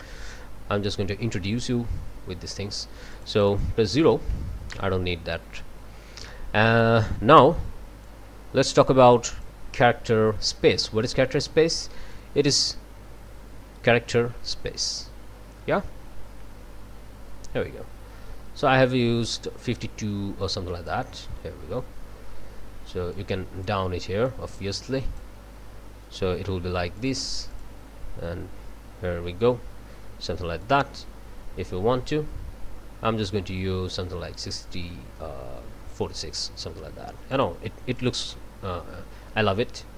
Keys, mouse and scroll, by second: 3.1 click, 4.0 0, 4.7 Return, 8.0-9.6 drag, 12.1-21.1 drag, 23.1-23.9 drag, 24.2-25.4 drag, 27.0 click, 27.5 click, 30.6 click, 32.1-36.1 drag, 37.3 click, 38.0 click.